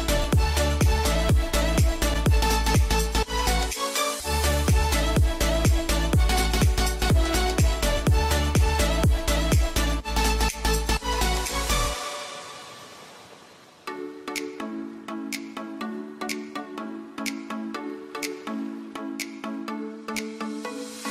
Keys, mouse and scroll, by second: 0.3-2.8 drag, 2.8 z, 3.5 F2, 3.7 click, 6.3-7.8 typing, 7.6-10.4 drag, 10.7 ctrl+r, 13.0-16.3 drag, 16.9-21.1 alt+drag.